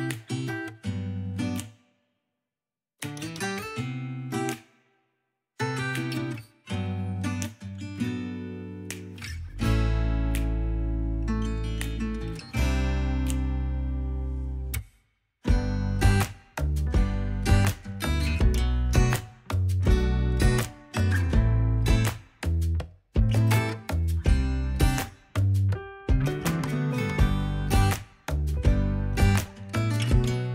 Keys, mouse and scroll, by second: 0.2 ctrl+shift+middle click, 0.5 click, 0.8 middle click, 0.9 KP_3, 1.0 ctrl+middle click, 1.1 f, 1.2-2.4 drag, 2.4 middle click, 2.6 KP_1, 2.7 click, 3.0 ctrl+middle click, 3.3 shift+click, 3.4 middle click, 3.6 KP_1, 3.6 ctrl+middle click, 3.9 click, 3.9 f, 4.1 click, 4.7 ctrl+shift+middle click, 5.1 click, 5.2 middle click, 5.3 click, 6.0 middle click, 6.1 shift+click, 6.4 middle click, 6.5 shift+click, 7.1 middle click, 7.6 click, 7.9 ctrl+shift+middle click, 8.1 click, 8.2 middle click, 9.0 ctrl+middle click, 9.3 KP_1, 9.7 click, 9.8 f, 9.9 click, 10.4 ctrl+middle click, 10.6 click, 10.9 ctrl+middle click, 11.1 click, 11.3 ctrl+z, 11.4 middle click, 11.4 shift+click, 11.9 shift+click, 12.0 middle click, 12.1 shift+click, 12.2 middle click, 12.3 shift+click, 12.6 middle click, 12.7 shift+click, 12.8 ctrl+middle click, 13.4 KP_1, 13.6 ctrl+middle click, 14.0 click, 14.4 middle click, 14.4 click, 14.6 shift+middle click, 14.6 click, 14.8 middle click, 14.9 click, 15.1 middle click, 15.2 click, 15.4 KP_1, 15.5 ctrl+middle click, 15.6 shift+click, 16.2 ctrl+z, 16.4 click, 16.6 ctrl+z, 16.7 shift+click, 17.2 ctrl+middle click, 17.6 click, 17.8 middle click, 17.8 f, 18.0 ctrl+click, 18.4 middle click, 18.6 ctrl+click, 18.7 ctrl+middle click, 19.4 ctrl+click, 19.8 ctrl+middle click, 19.9 shift+click, 20.0 middle click, 20.1 shift+click, 20.2 middle click, 20.3 shift+click, 20.5 middle click, 20.6 shift+click, 20.8 middle click, 20.9 shift+click, 21.0 ctrl+middle click, 21.4 KP_1, 21.5 ctrl+middle click, 22.2 KP_3, 22.4 ctrl+middle click, 22.6-23.6 drag, 23.6 ctrl+middle click, 23.7 ctrl+z, 23.9 ctrl+middle click, 24.0 click, 24.3 ctrl+z, 24.4 shift+middle click, 24.7 click, 24.8 f, 24.9-25.9 ctrl+drag, 26.1 f, 26.2 shift+click, 26.9 f, 27.0 shift+click, 27.2 middle click, 27.4 click, 27.6 ctrl+z, 27.6 ctrl+shift+click, 28.3 middle click, 28.6 click, 28.7 middle click, 28.8 shift+click, 29.3 middle click, 29.5 shift+click, 30.1 ctrl+middle click.